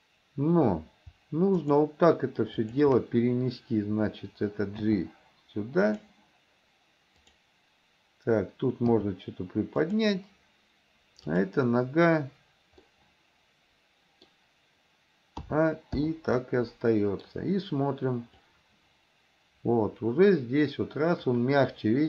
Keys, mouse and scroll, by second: 1.6 shift+click, 2.6 shift+click, 4.9 g, 7.2 click, 8.9 g, 12.9-14.3 middle drag, 15.5 a, 16.1 i, 16.4 middle click, 18.5-22.0 drag.